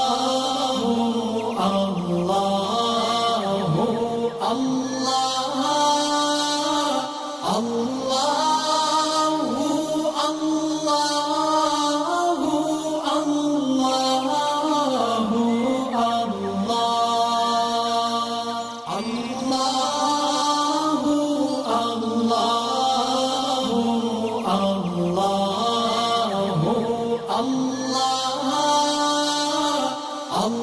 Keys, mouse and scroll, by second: 1.4 alt+scroll up 1, 2.2-3.0 alt+drag, 7.0-7.5 alt+scroll down 2, 8.2-9.7 alt+scroll up 2, 9.7-13.6 drag, 12.3-14.6 drag, 13.8 alt+scroll down 1, 14.5 space, 14.6 click, 15.0 alt+scroll up 1, 15.8 space, 15.9 click, 16.0-19.7 drag, 20.4 alt+scroll down 1, 21.0 alt+scroll up 1, 21.5 space, 21.6 click, 22.6-23.4 alt+drag, 25.7 ctrl+shift+], 26.8-28.1 drag.